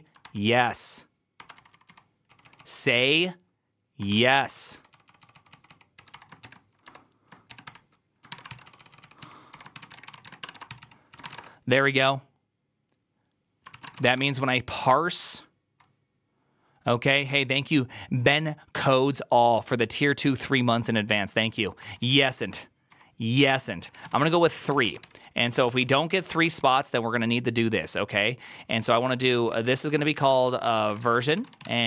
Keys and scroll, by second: 1.2-11.6 typing, 13.6 ctrl+c, 13.7-15.8 typing, 13.8 Return, 14.0 ctrl+d, 21.8-26.6 typing, 24.5 ctrl+c, 24.5 ctrl+:, 24.7 Return, 25.7 ctrl+c, 25.7 ctrl+c, 26.0 ctrl+c, 26.1 ctrl+:, 26.3 ctrl+:, 26.3 Return, 28.2-31.8 typing.